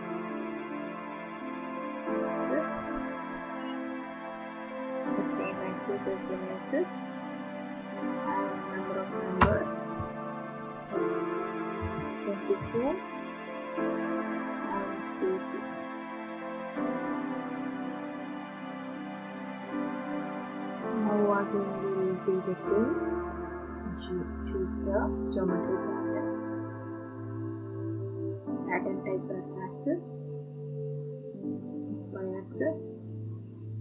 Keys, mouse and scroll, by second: 0.9 click, 1.9 click, 6.3 click, 8.1 click, 9.4 BackSpace, 11.8-12.6 typing, 15.2 click, 18.3 click, 22.4 click, 24.3 click, 25.6 click, 28.4 click, 29.7 click, 32.1 click, 33.3 click.